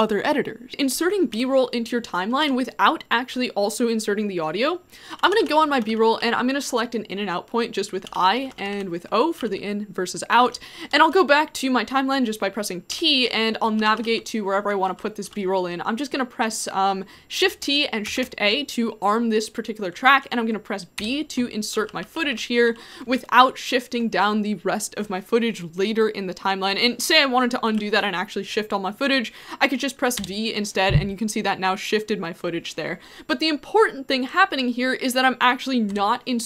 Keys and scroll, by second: 1.3 t, 2.4 t, 5.1-6.6 typing, 7.8-9.4 typing, 12.9-14.9 typing, 17.4 shift+t, 18.1 shift+a, 21.0-22.8 typing, 27.7 u, 30.2 v, 34.5 u, 35.9 b.